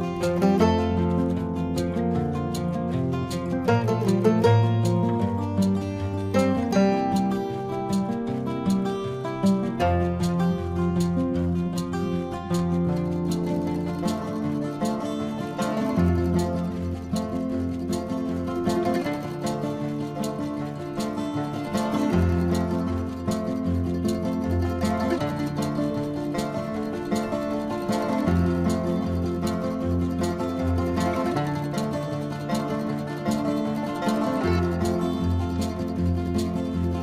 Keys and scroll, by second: 2.5 space, 2.7 ], 2.8 ctrl+-, 2.8 space, 2.9 ], 4.2 ctrl+alt+z, 4.4 space, 4.8 ctrl+alt+z, 5.5 space, 6.0 ctrl+alt+z, 6.4 ctrl+alt+z, 7.1 space, 8.2 space, 8.5 space, 9.6-10.3 typing, 12.7 space, 13.6 space, 14.5 space, 15.1 ctrl+-, 15.2 ctrl+alt+z, 15.3 ctrl+-, 15.5-16.8 typing, 16.5 ctrl+alt+z, 18.6 space, 22.7 space, 24.5 space, 27.2 space, 35.1 space, 36.1 ctrl+=, 36.2 space, 36.7 space.